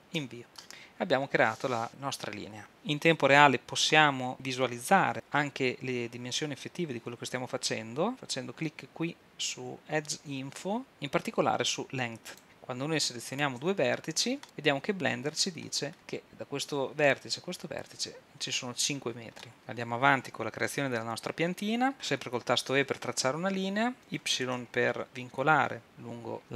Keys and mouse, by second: 12.3-16.3 drag, 19.4-25.5 drag, 22.7 e.